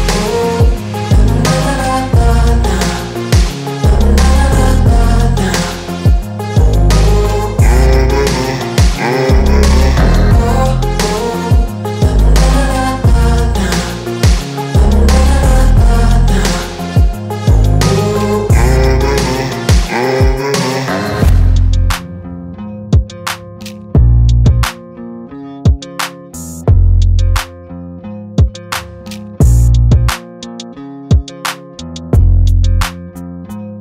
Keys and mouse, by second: 2.0 Tab, 2.8 click, 7.8 click, 7.8 click, 13.0 i, 13.7 click, 13.9 v, 15.7 click, 18.1 Tab, 20.0 shift+Tab, 21.6 click, 22.6 shift+Tab, 24.2 click, 25.1 shift+Tab, 26.3 click, 27.8 Tab, 31.8 click, 32.6 Left, 33.1 shift+Right, 33.7 Tab.